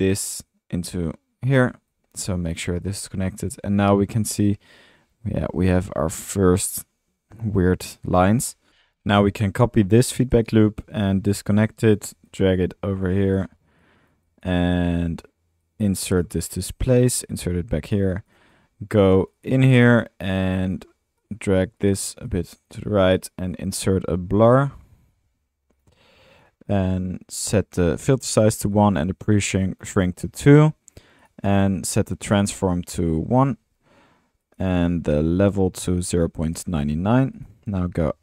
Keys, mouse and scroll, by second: 1.9 click, 3.7 middle click, 5.9 middle click, 6.1 middle click, 8.2 middle click, 8.4-10.5 typing, 23.9-25.2 typing, 33.5 space, 34.4 drag, 35.8-37.1 middle drag, 37.3 drag, 37.7-38.2 typing.